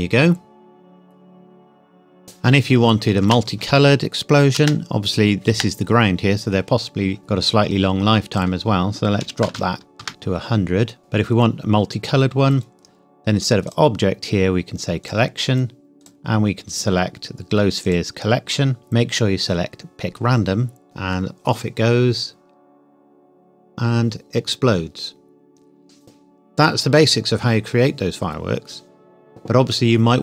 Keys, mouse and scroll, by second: 3.2 space, 5.1 scroll down 1, 5.5 space, 6.3-8.4 scroll up 1, 8.4 click, 9.2 KP_1, 9.4 KP_0, 10.0 KP_Enter, 11.0 click, 11.1-13.7 scroll down 1, 13.7 click.